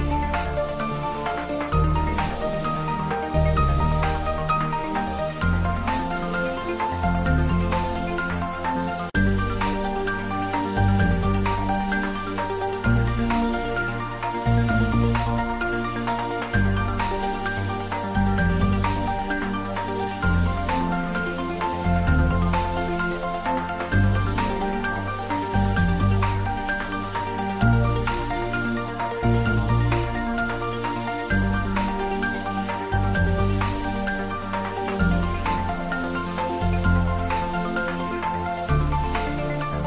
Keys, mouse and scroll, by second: 0.1 ctrl+r, 0.3 click, 1.5 Tab, 2.9 Tab, 3.7-7.5 drag, 7.6 shift+Num_Lock, 7.6 click, 7.7-9.1 shift+middle drag, 9.1 click, 9.4 Tab, 11.1 click, 13.4 click, 13.6 Tab, 14.0 ctrl+middle click, 15.1 Tab, 15.7 ctrl+r, 15.9 click, 17.2 Tab, 18.1 right click, 18.6 click, 18.9 middle click, 19.3 ctrl+middle click, 20.0-23.3 middle drag, 24.9 middle click, 25.1 ctrl+middle click, 25.7 Tab, 26.0 ctrl+middle click, 26.9 4, 27.3 click, 27.7 shift+click, 28.7 4, 28.9 click, 30.1 3, 30.7 shift+click, 35.4 shift+click, 36.0 s, 36.8 click, 37.4 ctrl+middle click, 37.9 middle click, 38.8 s, 39.6 click.